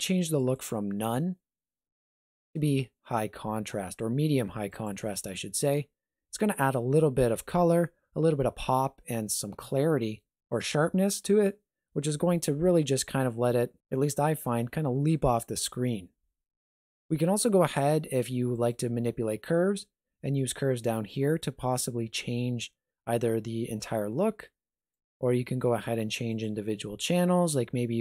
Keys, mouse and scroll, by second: 0.4 click, 18.5 click, 18.9 middle click, 21.3 click, 24.9 click, 25.6 click.